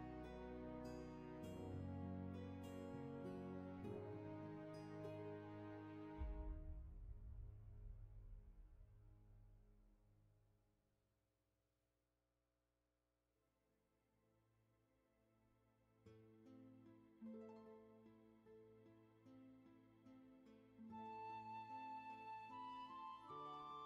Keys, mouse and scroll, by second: 2.2 ctrl+z, 6.3 ctrl+z, 14.9 space, 17.1 scroll up 1, 19.0 ctrl+z, 21.5 scroll down 1.